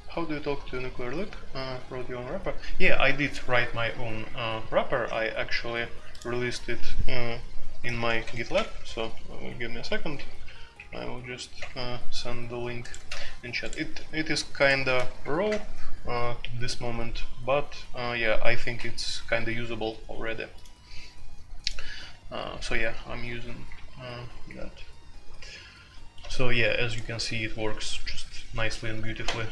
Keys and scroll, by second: 7.8-8.2 typing, 8.8 End, 9.4 Down, 9.6 Down, 9.8 Down, 10.1 Down, 11.5 Return, 13.0 ctrl+c, 14.6-15.3 typing, 15.4 Return.